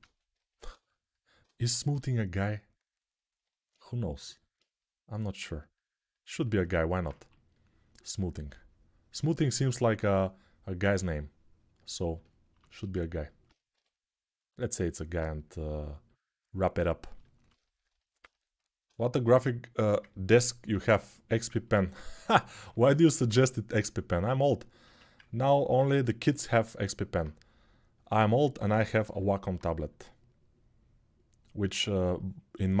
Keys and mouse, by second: 1.6 g, 6.9 1, 13.5 g, 22.4 2, 24.6 1.